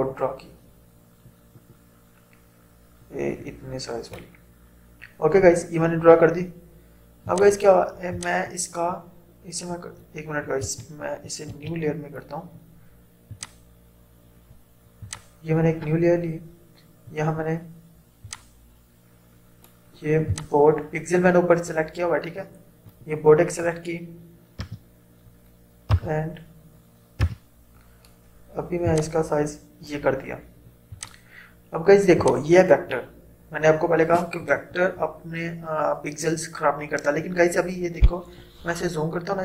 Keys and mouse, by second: 7.3-10.7 drag, 10.7 ctrl+z, 13.4 click, 18.4-24.6 drag, 24.6 t, 25.9 c, 27.3 v, 28.9-35.5 drag.